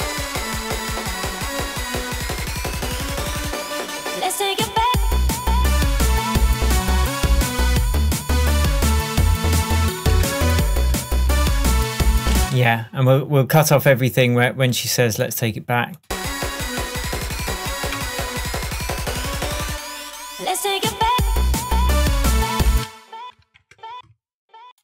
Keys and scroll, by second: 12.5 space, 18.1 BackSpace, 22.8 space.